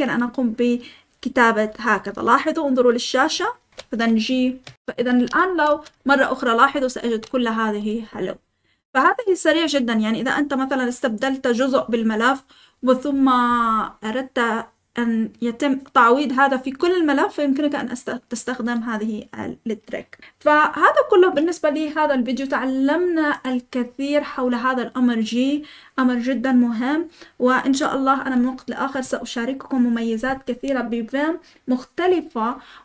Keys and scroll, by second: 3.7-7.5 typing.